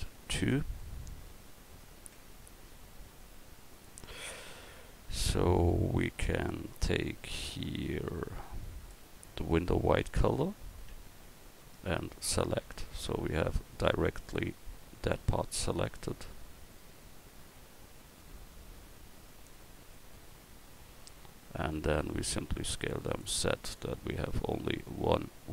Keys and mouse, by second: 2.1 Tab, 6.1-8.2 drag, 10.9 Tab, 14.2-16.4 right drag, 16.4 x, 18.3-20.5 typing, 22.1 s.